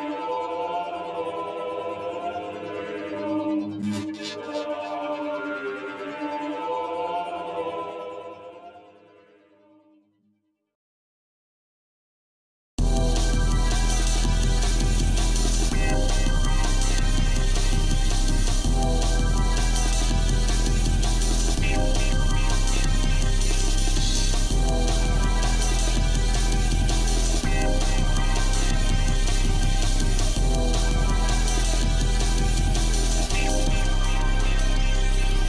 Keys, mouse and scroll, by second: 4.2 click, 5.1-12.7 drag, 14.1 click, 15.0 g, 22.0 click, 23.2 g, 26.8-31.2 drag, 32.6 g.